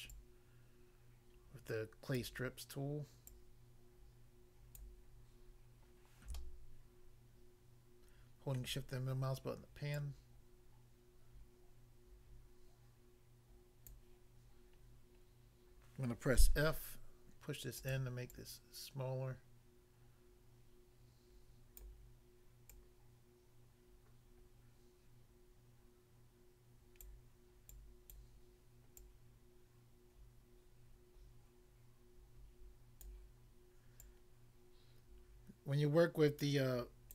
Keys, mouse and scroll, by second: 0.1 click, 2.2 click, 3.3 click, 4.8 click, 5.5-6.0 scroll up 1, 6.3 shift+middle click, 9.0-9.8 scroll up 1, 9.9 click, 13.9 click, 14.8 scroll down 1, 16.5 f, 17.9 click, 18.0 click, 18.4 click, 21.8 click, 22.8 click, 27.0 click, 27.7 click, 28.1 click, 29.0 click, 33.1 click, 34.1 click.